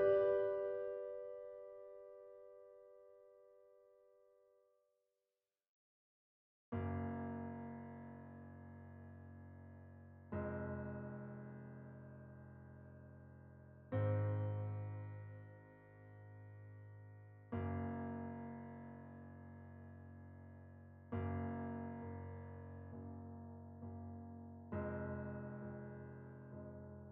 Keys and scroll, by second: 0.2 shift+z, 1.4 shift+4, 1.7 shift+5, 2.0 shift+Escape, 2.8 shift+super+z, 3.1 shift+super+Tab, 3.6-5.1 typing, 5.6 shift+Tab, 7.4 shift+r, 7.6 shift+4, 7.7 shift+5, 7.9 shift+Return, 9.1 shift+z, 10.2 shift+g, 12.4-15.1 typing, 14.7 Escape, 17.4 a, 19.8 g, 22.2-23.4 typing, 25.5 shift+s.